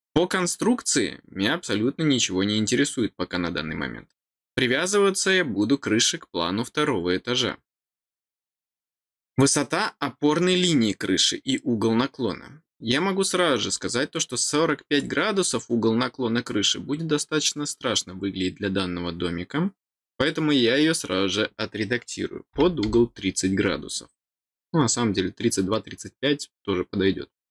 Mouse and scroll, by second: 8.1 middle click, 14.9 click.